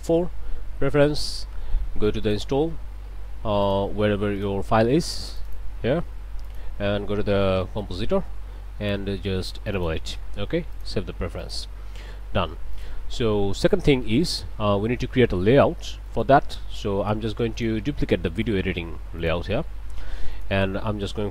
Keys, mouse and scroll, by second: 0.9 click, 2.2 click, 3.6 click, 4.4 click, 5.3 click, 6.4 click, 7.3 c, 7.4 o, 7.6 m, 7.8 p, 9.7 click, 10.7 click, 11.4 click, 12.8 click, 13.6 click, 16.1 right click, 17.5 click, 18.3 right click, 19.2 click, 20.3 click.